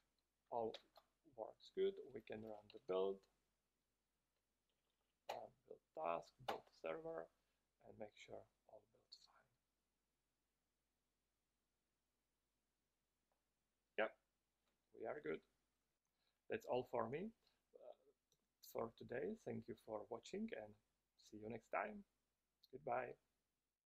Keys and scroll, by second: 1.1 shift+super+p, 5.1 Down, 5.2 Down, 5.4 Down, 5.6 Return, 6.8 Return.